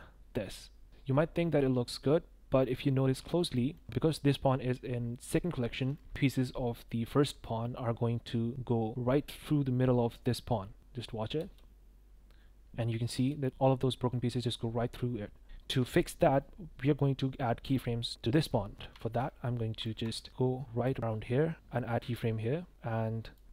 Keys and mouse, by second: 0.5-0.8 middle drag, 0.8 click, 3.4-3.7 drag, 11.3 space, 13.2 space, 19.0 shift+click, 20.3 click, 22.0 i, 23.3 click.